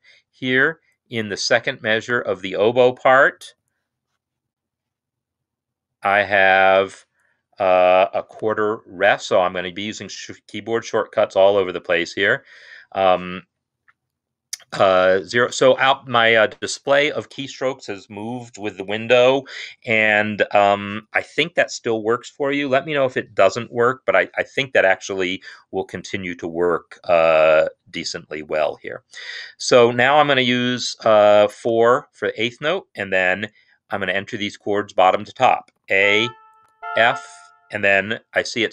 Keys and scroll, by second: 3.4 n, 8.3 5, 12.1 0, 31.7 4, 35.8 a, 36.6 shift+f.